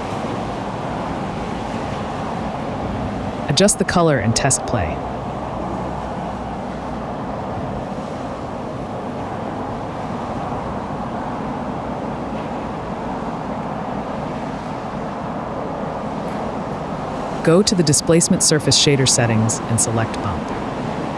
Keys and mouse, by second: 0.0 click, 1.0 click, 4.5-6.5 drag, 10.0-11.4 drag, 11.5 click, 14.8 click, 14.9 space, 17.2 space, 19.5 click, 20.5-21.1 drag.